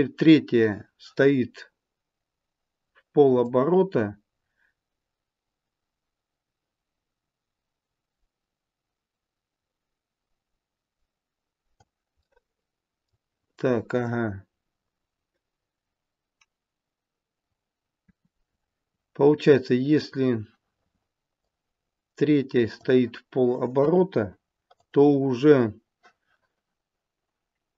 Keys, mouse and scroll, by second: 3.4 click, 12.2 middle click, 18.0 KP_7, 21.4 click, 23.8 KP_1, 24.6 click.